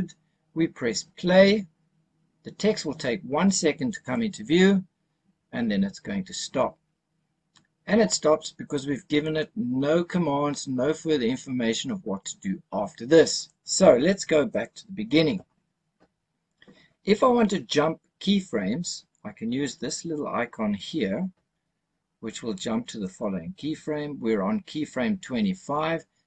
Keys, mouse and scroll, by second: 4.0 click, 13.3 click, 14.4 click, 22.9 click.